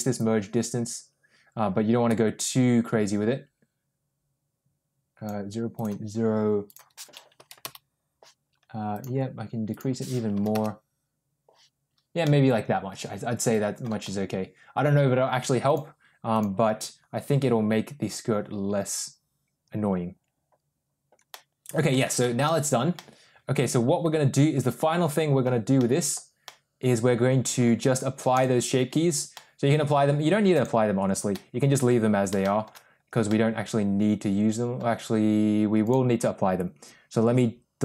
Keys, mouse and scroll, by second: 0.0-5.2 drag, 5.6-8.6 drag, 8.8-11.9 drag, 12.1-13.8 middle drag, 14.0 Tab, 15.6 click, 16.2 click, 21.2-21.8 middle drag, 22.1 shift+middle drag, 22.8-25.3 middle drag, 25.6-26.0 middle drag, 26.4-27.5 middle drag, 28.3 click, 29.2-29.8 middle drag, 30.5 click, 31.2-31.7 middle drag, 32.3 shift+middle drag, 33.1-34.7 middle drag, 35.8 click.